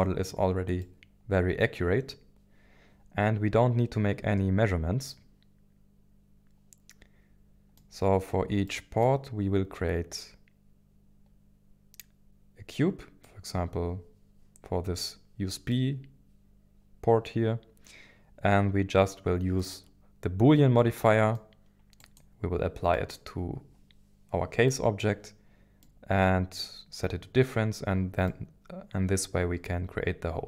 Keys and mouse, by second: 0.9-7.8 middle drag, 13.3 middle click, 15.7-19.6 middle drag, 20.8-21.4 middle drag, 22.1 click, 22.9 middle drag, 24.7-25.0 middle drag, 25.8-26.3 middle drag, 28.3-30.3 middle drag.